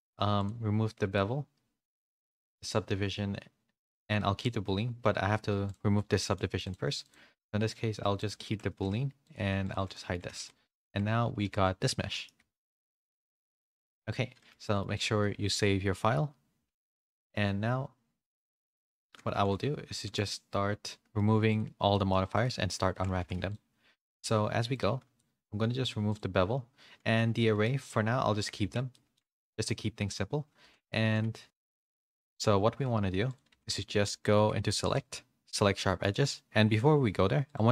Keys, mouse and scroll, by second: 0.3-1.8 drag, 2.4 click, 6.1 middle click, 6.6 click, 8.2 click, 8.5 ctrl+a, 9.2 click, 9.5-11.5 typing, 9.9 middle click, 10.8 Tab, 11.6 middle click, 12.7 a, 12.7 Tab, 13.0 a, 13.3 a, 13.4 middle click, 13.8 shift+middle click, 14.3 middle click, 15.2 middle click, 16.6 ctrl+s, 19.3 a, 19.6 a, 20.0 middle click, 20.3 middle click, 21.9 middle click, 22.3 click, 22.9 shift+middle click, 24.8 click, 24.8 a, 26.0 click, 27.1 middle click, 28.9 Tab, 28.9 middle click, 29.3 shift+middle click, 29.6 middle click, 30.6 2, 31.0 a, 31.5 ctrl+e, 31.5 a, 31.8 ctrl+e, 33.5 a, 34.3 2, 34.9-37.7 drag.